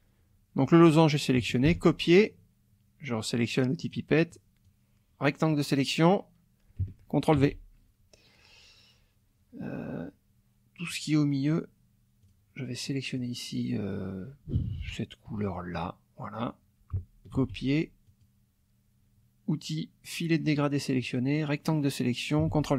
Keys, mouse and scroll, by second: 1.6 ctrl+c, 3.8 click, 4.6-6.3 drag, 7.4 ctrl+v, 10.9 click, 12.2 click, 13.2 click, 15.7 click, 17.3 ctrl+c, 18.0 click, 21.0-22.5 drag, 22.5 ctrl+v.